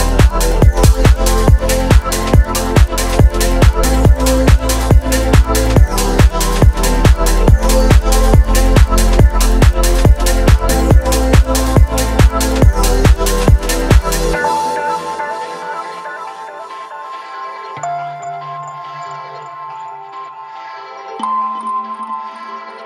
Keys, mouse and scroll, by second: 0.7 scroll up 1, 1.4 click, 2.8 shift+click, 3.4 shift+click, 5.3 ctrl+z, 7.0 shift+click, 8.7 alt+p, 10.3 click, 11.3 g, 11.7 z, 13.5 click, 14.9 click, 15.6 shift+click, 16.3 shift+click, 17.9 ctrl+p, 19.4 space, 22.1 space.